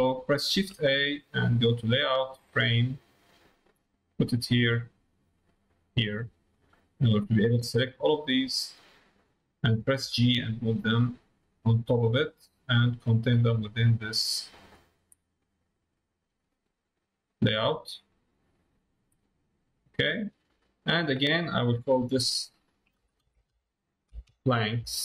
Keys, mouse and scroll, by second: 5.3 click, 6.6 middle click, 7.2-8.5 drag, 16.0 click, 16.8-17.9 drag, 18.1 middle click, 20.0 middle click, 21.7-25.0 drag.